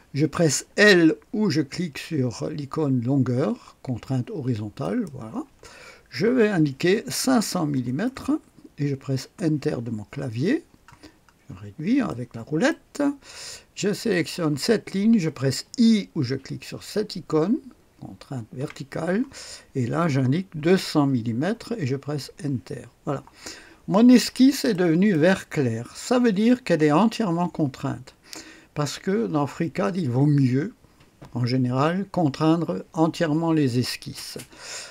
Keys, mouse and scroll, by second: 4.7 click, 7.1 KP_5, 7.6 KP_0, 8.0 KP_0, 9.3 Return, 10.7-11.6 scroll down 1, 12.0 middle click, 14.0 click, 18.5 i, 20.5 KP_2, 20.8 KP_0, 21.3 KP_0, 22.1 Return, 24.6-25.7 drag, 25.8 typing.